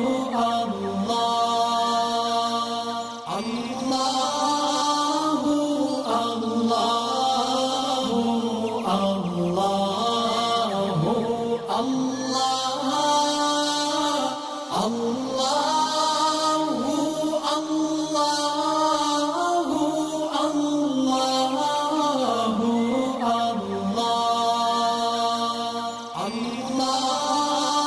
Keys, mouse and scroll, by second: 1.3 space, 1.5 click, 2.7-3.6 alt+click, 3.9 alt+scroll up 1, 5.1-6.6 alt+shift+click, 6.7-7.5 click, 7.5-8.1 alt+scroll down 4, 8.1 space, 8.1 click, 8.5 space, 8.8 click, 9.1 space, 9.3-14.0 drag, 15.1-16.0 drag, 18.1 click, 19.0 alt+scroll down 1, 19.8 alt+scroll up 1, 23.2 click, 25.8-27.8 drag.